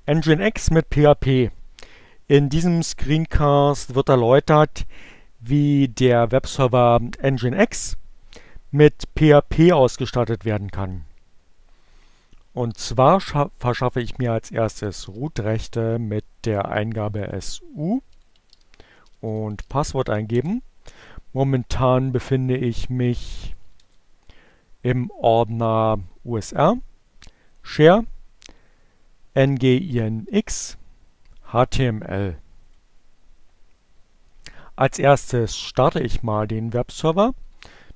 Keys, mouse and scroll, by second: 14.6-15.5 typing, 17.3-18.5 typing, 20.0 Return, 22.6-23.6 typing, 23.7 Return, 32.1 click, 35.1-36.1 typing, 37.7-37.9 typing.